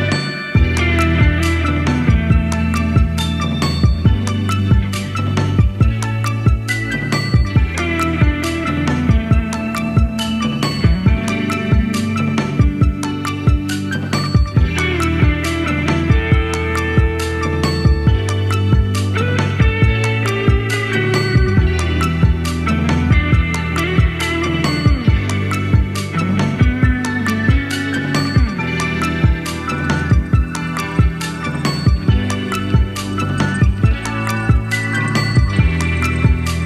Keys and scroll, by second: 13.5 typing, 17.4 Down, 22.9 BackSpace, 31.8 super+d, 34.9 Up.